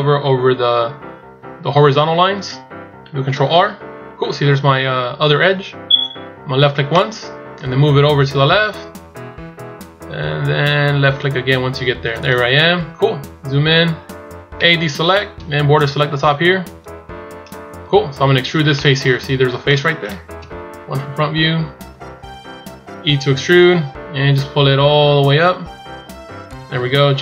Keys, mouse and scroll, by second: 13.0-13.6 scroll up 5, 14.4 a, 15.3 b, 17.3-17.7 scroll down 2, 18.7 middle click, 18.7 shift+scroll up 1, 20.2 KP_1, 21.0-21.4 scroll up 2, 21.4 scroll down 4, 21.9 shift+scroll up 2, 22.9 e.